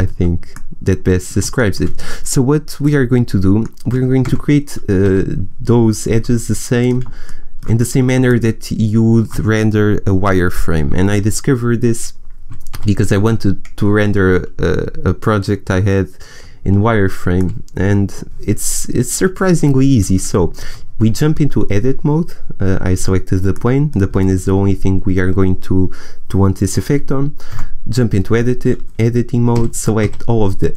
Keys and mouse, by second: 0.8 middle click, 3.5 middle click, 3.8 click, 4.1 Tab, 6.7 a, 7.2-12.7 drag, 12.7 a, 17.4 middle click, 21.1 Tab, 27.6 Tab, 29.9 a.